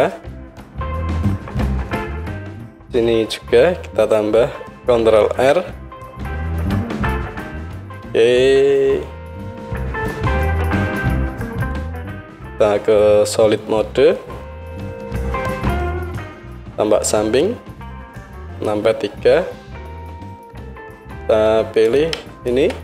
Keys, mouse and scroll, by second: 5.2 ctrl+r, 12.3 click, 12.3-18.0 middle drag, 16.5 KP_3, 18.0-21.9 drag, 21.9-22.8 shift+middle drag.